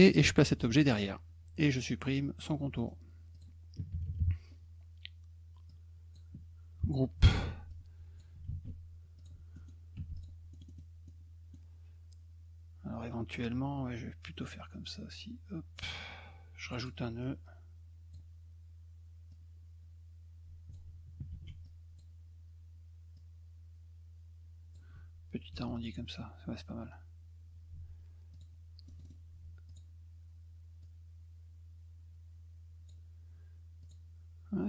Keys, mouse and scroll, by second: 2.8 middle click, 3.3 click, 5.7 click, 7.2 ctrl+g, 7.7 click, 9.2 click, 9.5 middle click, 10.0 F2, 10.1 click, 10.5 middle click, 10.6 middle click, 11.0 middle click, 13.4-15.7 drag, 16.6 click, 16.8 click, 17.2 click, 19.3-20.7 drag, 21.3 ctrl+z, 21.6 click, 23.1-24.7 drag, 25.7 click, 27.7 F2, 28.3 click, 28.8 middle click, 29.0 middle click, 29.7 click, 30.8-32.9 drag, 33.8 click.